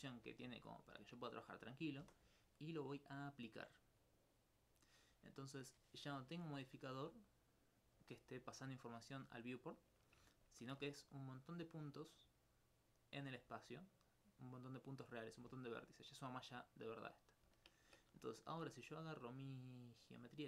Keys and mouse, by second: 0.7 alt+click, 3.0 click, 5.4 middle click, 11.1 right click, 11.6 Tab, 12.2 click, 13.6 alt+click, 15.5 alt+Tab, 16.6 click, 17.6 alt+click, 17.8 alt+click, 19.0 right click.